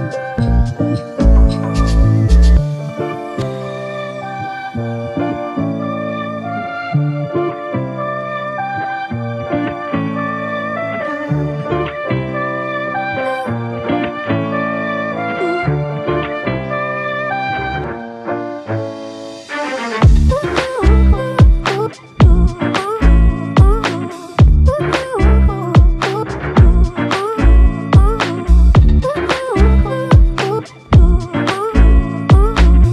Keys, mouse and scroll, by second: 1.2 alt+click, 3.9 double click, 7.6 alt+click, 10.3 ctrl+click, 11.7 alt+shift+click, 12.4 alt+click, 13.6 ctrl+click, 14.5 ctrl+click, 16.2 ctrl+click, 21.5 ctrl+click, 23.3 double click, 27.0 alt+click, 29.4 double click, 29.8 alt+click, 31.3 double click.